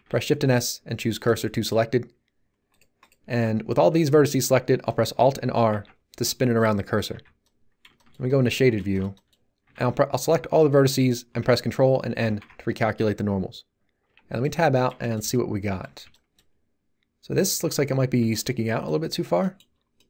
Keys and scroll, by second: 3.3 Tab, 5.7 alt+r, 7.1 z, 9.6 a, 12.2 ctrl+n, 14.0 Tab.